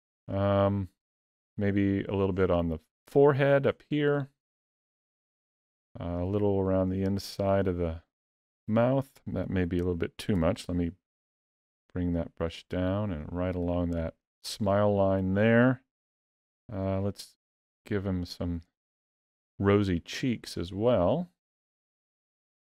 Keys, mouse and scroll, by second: 2.2 click, 3.5 click, 5.6 middle click, 6.8 click, 8.5 ctrl+z, 10.2 f, 12.9 click, 14.6 middle click, 16.0 f, 17.5 click, 18.9 middle click, 20.2 click, 21.4 middle click, 22.3 click.